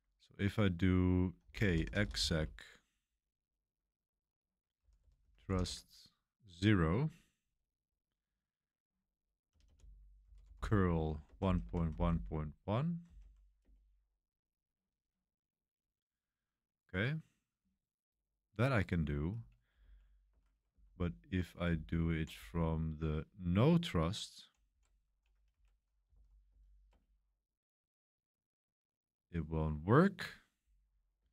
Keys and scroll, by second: 1.4-2.6 typing, 4.5-5.9 typing, 9.2-13.5 typing, 13.6 Return, 19.8 Page_Up, 20.3 ⟲, 20.7 0, 21.7 Left, 22.2 Left, 22.8-24.4 typing, 25.5 Right, 25.5-26.9 typing.